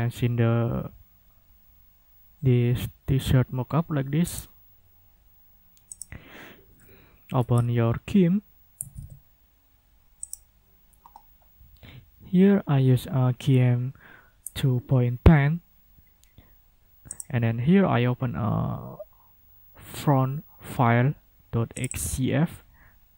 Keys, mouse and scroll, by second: 4.3 click, 6.0 click, 7.4 i, 8.6-9.5 typing, 10.2 click, 17.1 click, 21.8 click.